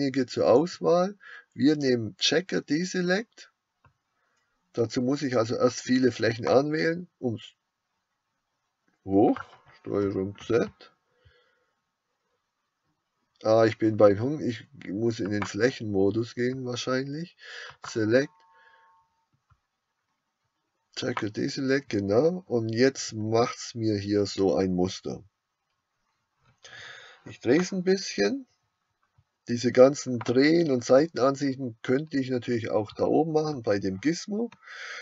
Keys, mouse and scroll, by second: 10.1 ctrl+z, 10.1-15.5 drag, 27.8 middle click.